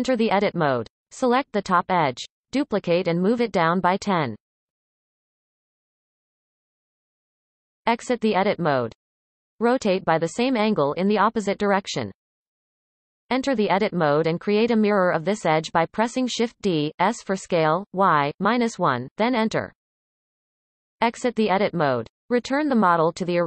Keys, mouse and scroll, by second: 0.3 Tab, 1.6 click, 2.8 shift+d, 7.3 Tab, 9.6 r, 12.8 Tab, 15.6 shift+d, 20.5 Tab, 22.7-23.4 drag.